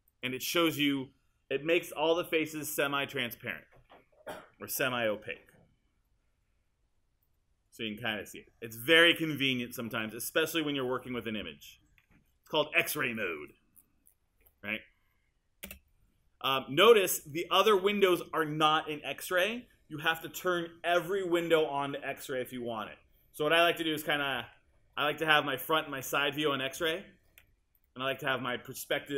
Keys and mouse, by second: 15.7 space.